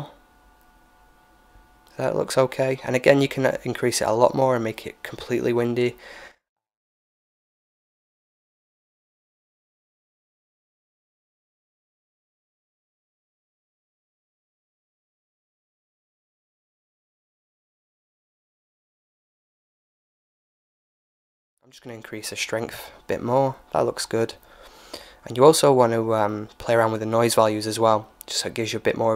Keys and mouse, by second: 2.9-5.1 typing, 19.6-21.5 drag, 27.3-29.1 drag.